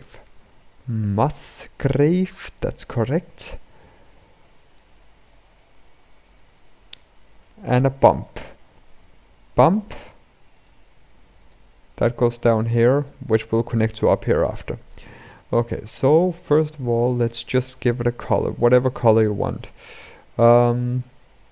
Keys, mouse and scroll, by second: 5.0 click, 12.8 click, 17.7-19.9 drag.